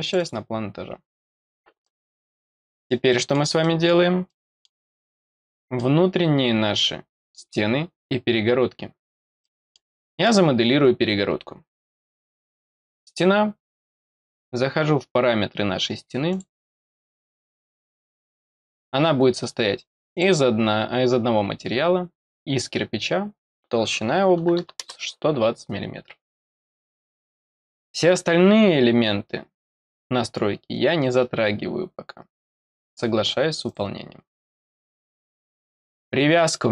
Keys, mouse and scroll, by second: 0.0 click, 0.1 click, 1.8 middle click, 2.5 middle click, 3.0 middle click, 3.6 middle click, 4.2 middle click, 5.4 middle click, 6.2-6.5 scroll up 2, 8.8-9.4 scroll down 4, 9.4 middle click, 10.0 middle click, 11.4 scroll down 2, 12.0 scroll down 2, 16.3 click, 20.1 click, 23.0 click, 29.0-30.8 scroll down 4, 30.8-31.1 scroll up 2, 33.6 click, 34.5-35.8 scroll up 2, 35.8 click.